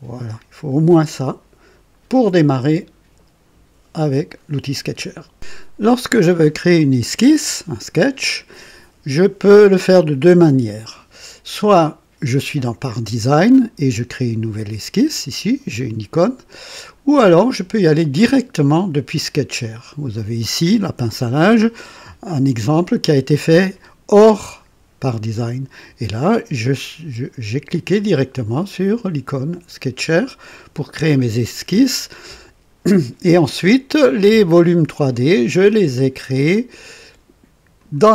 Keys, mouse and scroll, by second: 15.5 right click, 16.8 click, 17.3 click, 18.9 click, 28.9 click, 30.2 click, 33.9-35.8 drag, 36.5 click, 37.7 click.